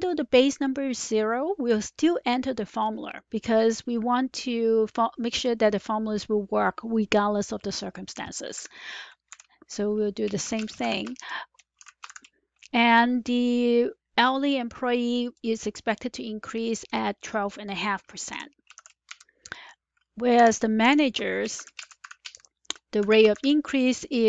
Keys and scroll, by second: 8.5 typing, 9.2 Left, 10.0-12.5 typing, 18.2 F4, 18.7 typing, 19.0 Return, 20.1-24.2 typing.